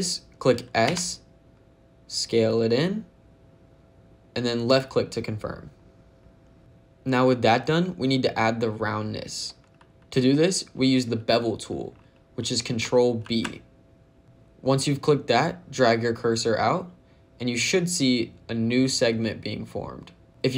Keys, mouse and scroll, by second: 0.7 s, 4.6 click, 13.1 ctrl+b.